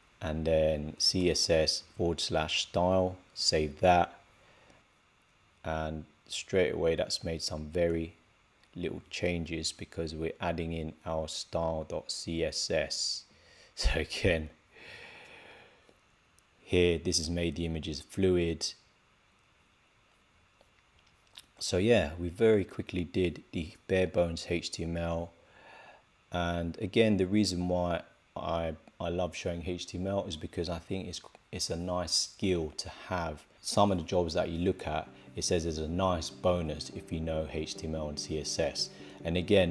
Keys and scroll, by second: 3.3 super+s.